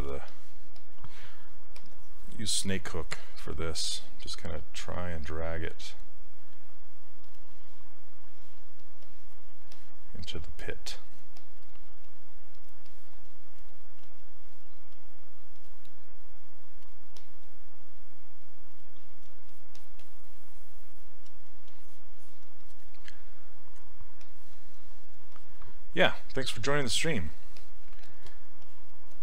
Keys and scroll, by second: 3.5 s, 14.1 s.